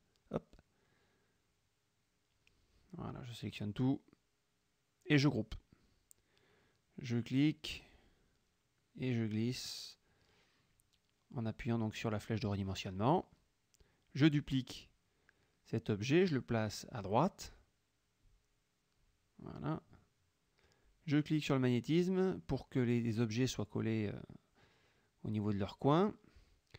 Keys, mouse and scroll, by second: 1.1 click, 3.2-4.4 drag, 5.2 ctrl+g, 7.1-8.2 ctrl+drag, 8.5-9.1 ctrl+drag, 9.8-10.8 ctrl+drag, 11.0-12.3 ctrl+drag, 14.3 ctrl+d, 15.4-20.7 ctrl+drag, 21.3 click, 22.2-23.3 drag, 23.3 click, 24.4 click.